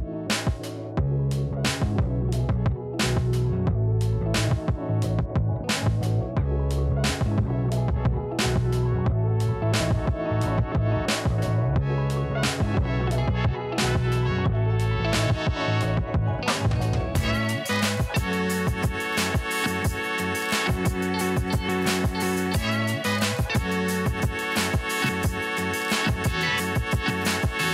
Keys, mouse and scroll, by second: 0.0 alt+scroll down 1, 0.9 click, 1.3 Right, 1.8-2.1 scroll down 1, 2.4-2.8 alt+scroll down 1, 2.8-3.8 alt+scroll up 3, 3.8 right click, 4.1 click, 4.3-4.6 alt+scroll up 1, 5.3 ctrl+shift+a, 8.7 click, 9.3 click, 9.3 alt+scroll up 1, 10.5 alt+scroll, 10.6 ctrl+l, 11.6 click, 13.4 alt+scroll down 1, 14.7-15.1 alt+scroll up 1, 15.1-15.5 alt+scroll down 1, 16.4 click, 17.7 right click, 18.0-23.4 drag, 23.4 ctrl+t, 24.4-26.0 drag, 26.4-26.7 alt+scroll up 1, 26.8-27.2 scroll down 1.